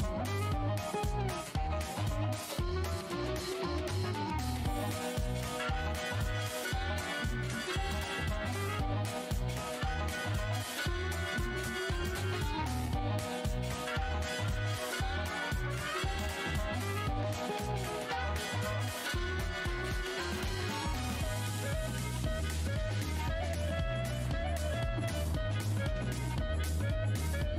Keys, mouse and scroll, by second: 1.7 space, 2.3 click, 3.5 right click, 3.8 click, 5.3 alt+scroll up 1, 5.4 `, 5.7-6.1 alt+scroll, 6.1 v, 7.8 alt+click, 8.2 alt+scroll down 1, 8.7-9.5 typing, 10.5 alt+click, 11.3 right click, 12.1 click, 13.2 shift+click, 13.5 shift+right click, 14.0 w, 15.2 right click, 17.2 shift+click, 19.7 right click, 20.0 click, 23.7 click, 24.2 right click, 24.5 click, 25.0 shift+right click, 25.4 alt+click, 25.5 alt+scroll up 1.